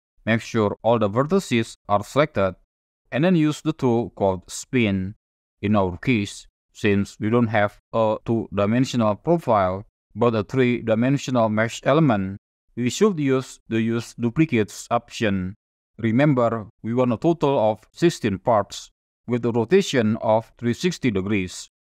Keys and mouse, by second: 0.8 a, 4.0 click, 8.4-10.0 drag, 10.0 middle click, 16.3-18.6 drag, 20.0 click.